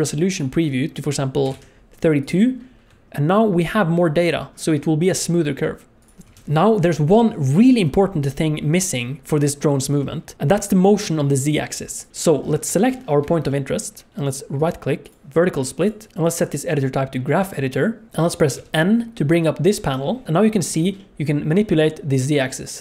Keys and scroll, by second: 6.2 space, 10.3 space, 18.6 n, 20.2 alt+a.